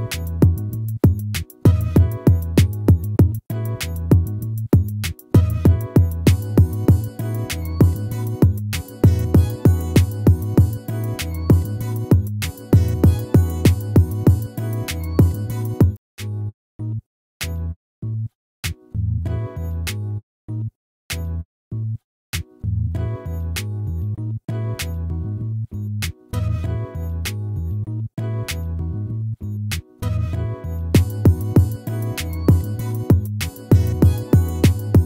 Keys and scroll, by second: 2.1 ctrl+-, 6.3 ctrl+z, 9.8 ctrl+z.